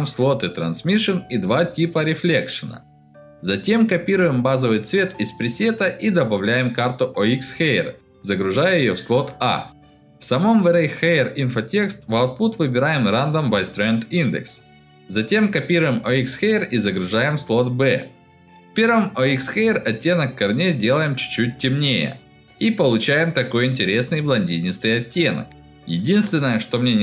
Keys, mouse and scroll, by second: 3.0 middle click, 3.3 click, 3.9 click, 5.4 click, 5.9 click, 6.0 click, 7.6 right click, 10.6 click, 11.8 click, 12.8 middle click, 15.8 shift+click, 16.7 click, 17.4 click, 20.1 click, 20.8 click, 21.3 click, 23.5 click, 23.9 click, 24.5 click, 24.8 scroll up 1, 25.0 middle click, 26.0 middle click, 26.6 middle click.